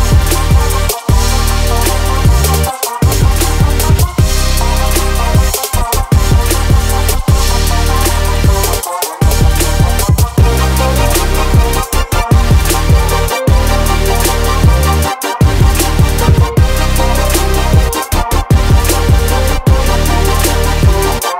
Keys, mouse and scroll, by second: 0.9-1.3 scroll up 1, 3.9 click, 5.8 click, 6.5-7.5 drag, 8.4-16.6 drag, 17.1-19.8 scroll up 1.